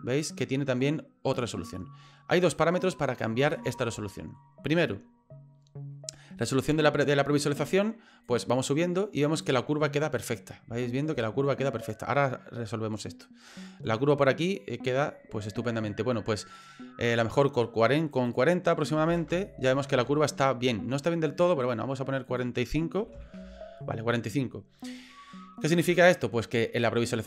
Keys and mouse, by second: 1.7 middle click, 2.8 middle click, 3.6 shift+middle click, 4.1 middle click, 8.3-9.4 drag, 10.8 shift+middle click, 16.7-18.1 drag, 18.2-20.3 drag, 22.3-23.9 drag.